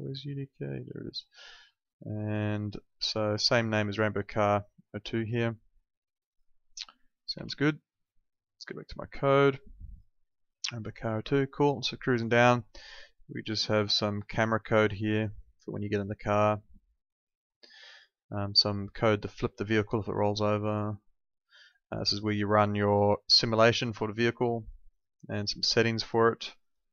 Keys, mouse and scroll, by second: 0.6 alt+click, 6.2 click, 7.4 alt+Tab, 9.1 alt+click, 13.3 click, 18.5 click.